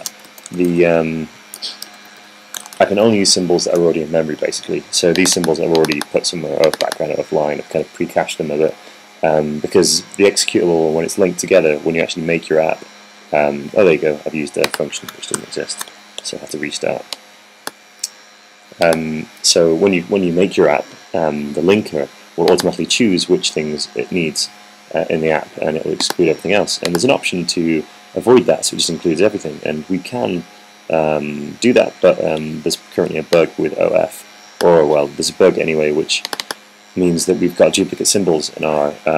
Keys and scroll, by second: 0.0-6.6 typing, 16.2 super+r.